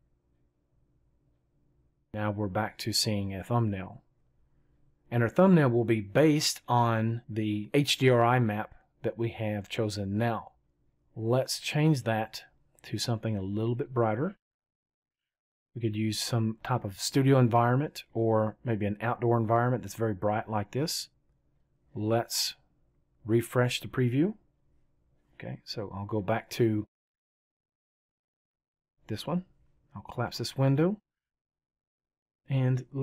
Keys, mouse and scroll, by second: 20.4-21.9 right drag.